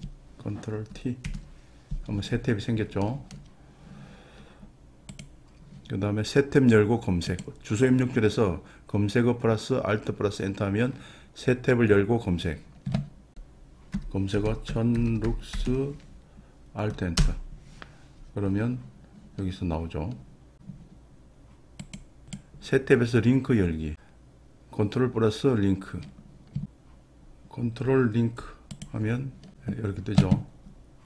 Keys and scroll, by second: 1.3 ctrl+t, 8.2 alt+Return, 13.3 BackSpace.